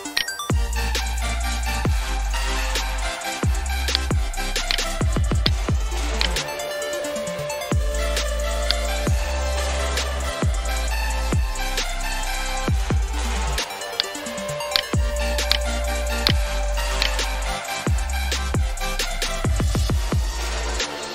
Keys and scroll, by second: 9.4-10.3 typing, 16.4-17.3 typing, 19.2-20.1 typing.